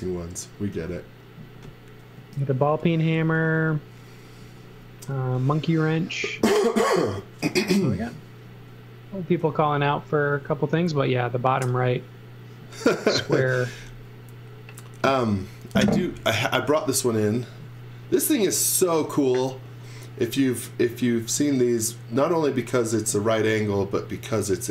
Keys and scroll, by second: 0.7 e, 2.1 z, 3.4 x, 9.5 e, 13.1 x.